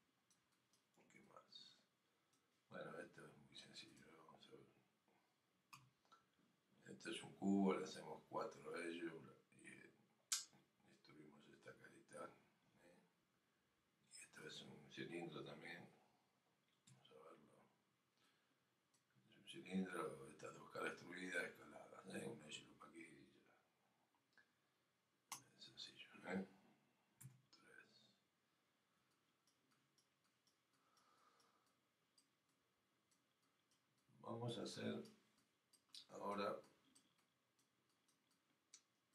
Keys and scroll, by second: 5.9 f, 6.1 f.